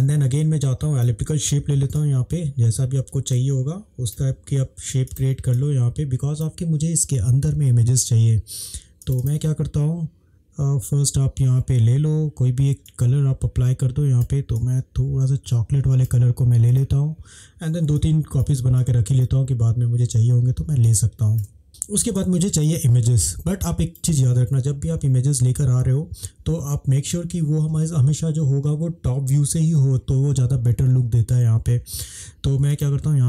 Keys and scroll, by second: 20.9 space.